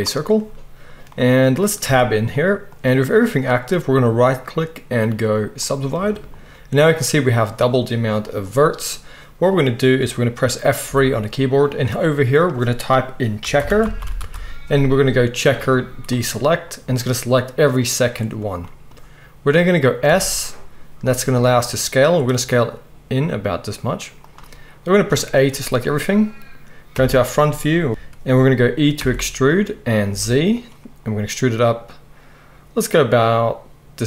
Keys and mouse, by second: 1.8 Tab, 4.2-8.3 middle drag, 4.2-8.3 right drag, 10.9 F3, 20.1 s, 23.1-27.9 drag, 23.1-24.3 middle drag, 23.1-24.3 right drag, 25.1 a, 26.9 KP_1, 27.9 ctrl+z, 27.9-34.0 middle drag, 27.9 e, 29.0 e.